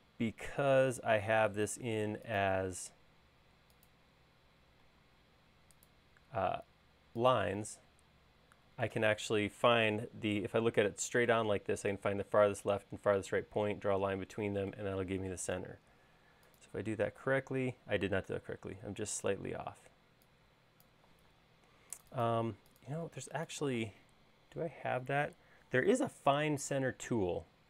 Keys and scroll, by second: 4.9 l, 10.1 space, 15.6 c, 19.8 e, 21.3 space.